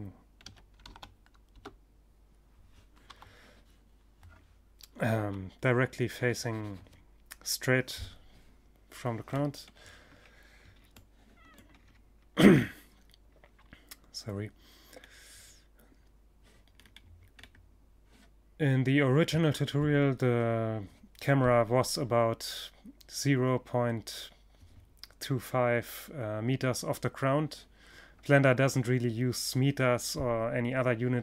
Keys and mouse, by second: 1.5 KP_5, 3.6 KP_3, 7.8-13.0 middle drag, 13.5-17.8 middle drag, 30.6-31.2 middle drag.